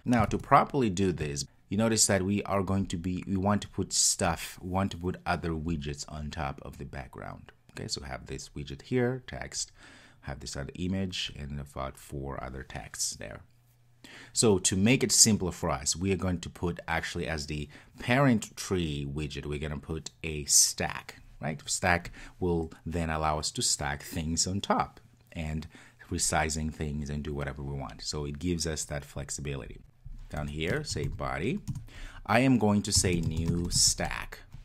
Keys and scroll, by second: 31.8 Return.